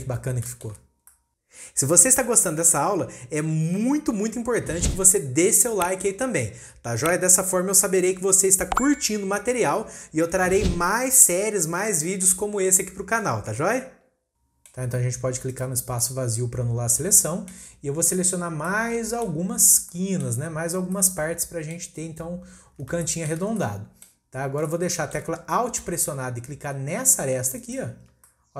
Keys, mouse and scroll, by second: 0.2 scroll up 2, 0.5 shift+middle click, 1.0 scroll up 1, 1.1-14.9 middle drag, 14.9-15.5 scroll down 4, 15.5 click, 16.0-19.5 middle drag, 19.5-19.9 scroll up 2, 19.9-20.5 middle drag, 20.5-20.9 scroll down 1, 20.9-24.3 middle drag, 24.3-24.7 scroll up 1, 24.7-25.5 shift+middle drag, 25.5-27.1 scroll up 1, 27.1-27.6 scroll up 1, 27.6 alt+click, 28.3-28.5 middle drag.